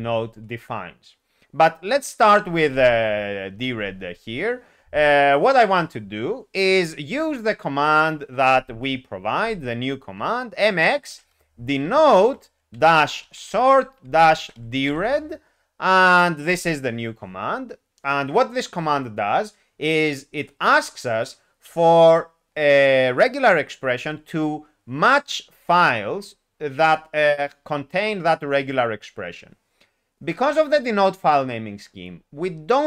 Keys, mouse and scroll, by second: 9.4 alt+x, 11.1-15.1 typing, 16.4 Return.